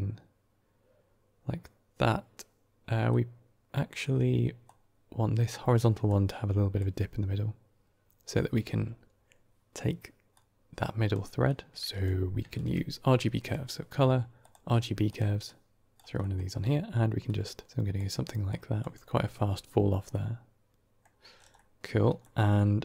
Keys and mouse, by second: 3.0 click, 4.5 click, 5.9 click, 10.2 click, 11.3 click, 12.4 shift+a, 15.3-15.8 drag, 16.1 middle click, 17.1 click, 18.4 click, 20.0 middle click, 21.4 middle click, 22.1-22.8 middle drag.